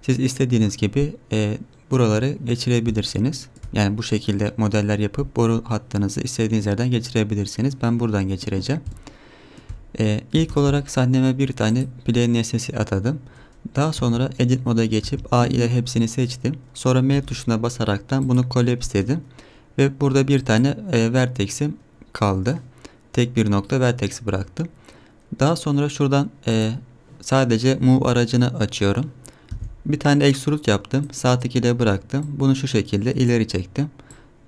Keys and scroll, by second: 10.5 shift+a, 11.9 shift+a, 14.0 Tab, 15.0 a, 17.1 m, 18.8 1, 29.5 e.